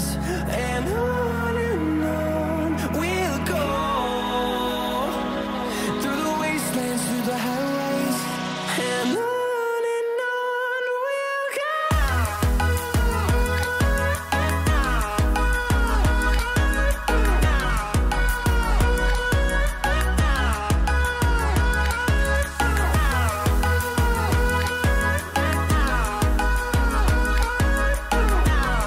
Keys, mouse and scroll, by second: 6.4-6.8 typing, 6.8 click, 17.2 typing, 17.3-23.3 drag, 23.3 typing, 23.3 click, 24.3 scroll up 1, 25.4-28.2 drag, 28.6 scroll down 1.